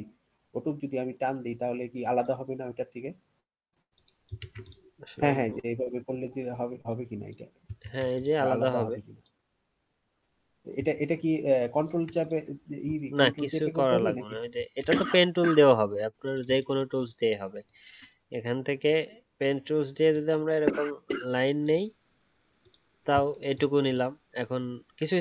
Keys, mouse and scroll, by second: 4.4 ctrl+z, 7.8 ctrl+z, 11.0 ctrl+z, 11.8 alt+scroll down 1, 14.8 ctrl+z, 17.7-21.9 alt+scroll up 1.